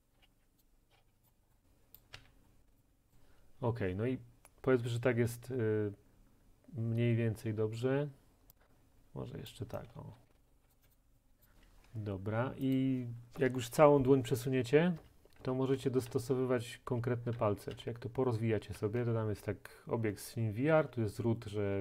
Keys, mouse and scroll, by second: 0.0-2.7 typing, 0.6 right click, 1.3 right click, 2.0 click, 3.2 right click, 9.5 click, 10.0-10.9 typing, 10.7 click, 10.9 click, 11.4 click, 12.8 right click, 15.0 Right, 15.5 Down, 15.5 click, 15.8 Right, 16.1 Down, 17.0 Right, 17.4 Down, 17.8 Right, 21.7 Up, 21.7 Down.